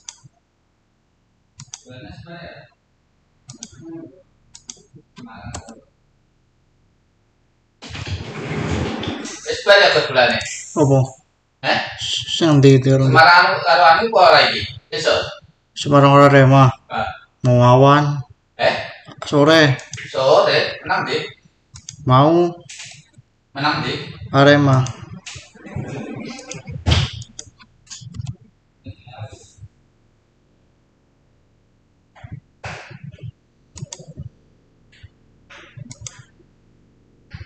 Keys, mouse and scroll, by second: 5.5 Return, 10.2 click, 12.4 click, 19.7 click, 21.6 click, 24.6 click, 24.6 click, 33.6 click, 33.7 click, 35.8 click.